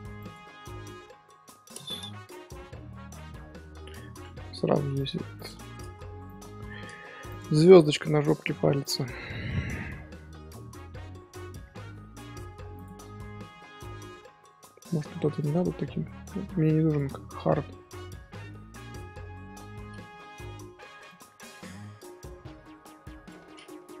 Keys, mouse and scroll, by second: 2.5-4.1 middle drag, 4.1-4.9 scroll up 1, 4.9 click, 5.3-7.3 drag, 7.5-10.6 middle drag, 14.1-14.8 middle drag, 14.8 Tab, 15.5 Tab, 16.4 2, 16.8 alt+click, 17.2 Tab, 18.0 Tab, 21.0-24.0 drag.